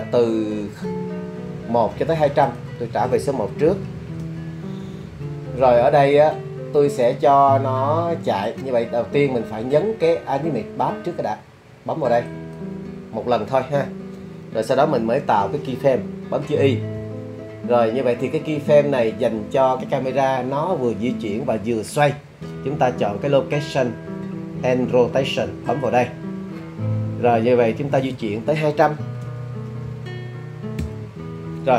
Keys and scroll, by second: 3.7 1, 4.2 Return, 17.0 i, 29.3 2, 29.7 0, 29.9 0, 30.9 Return.